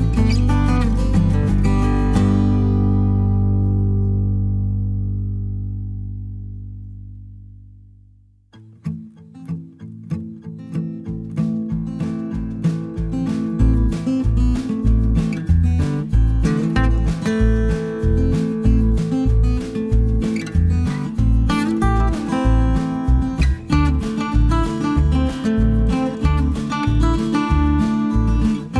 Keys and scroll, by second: 0.6 Delete, 2.4 Delete, 12.4 b.